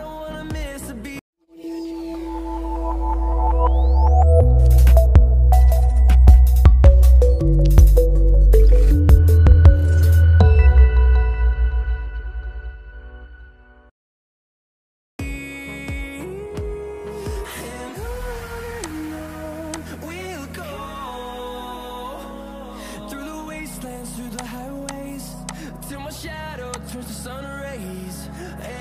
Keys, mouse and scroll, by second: 18.7 shift+click.